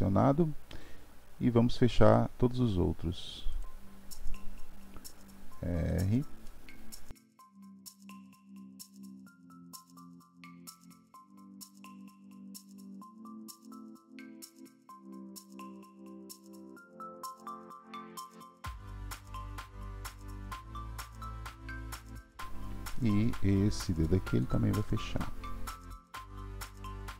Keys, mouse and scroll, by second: 3.5 click, 5.0 r, 6.5-7.3 middle drag, 7.3-7.6 drag, 8.3 KP_3, 9.0 r, 10.6 click, 10.8 r, 12.0 click, 12.1 r, 12.6 click, 12.6 r, 13.0 click, 13.1 r, 13.6 click, 14.1 r, 15.2 click, 15.5 r, 16.1-17.4 drag, 17.4 middle click, 18.0 KP_3, 18.5 click, 18.7 r, 20.1-21.4 drag, 21.4 r, 23.0-24.4 middle drag, 24.4 click, 25.8 r, 26.3 click, 26.4 r, 26.9-27.1 middle drag.